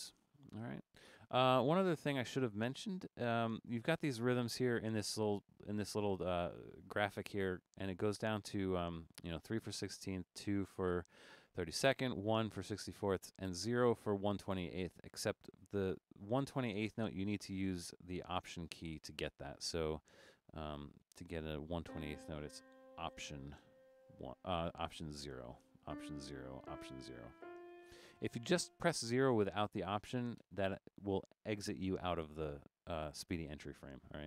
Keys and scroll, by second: 25.3 alt+0, 26.2 alt+0, 26.8 alt+0, 27.6 alt+0, 30.4 0.